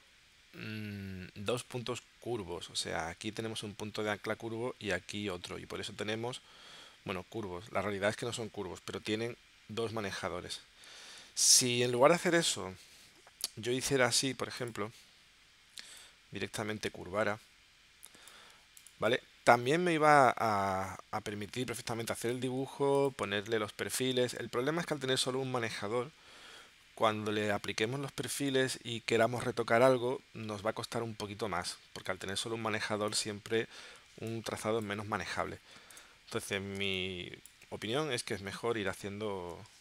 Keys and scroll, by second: 12.0 v, 12.9 p, 22.6 a, 34.0 v, 35.9 BackSpace, 36.8 space, 38.5 p.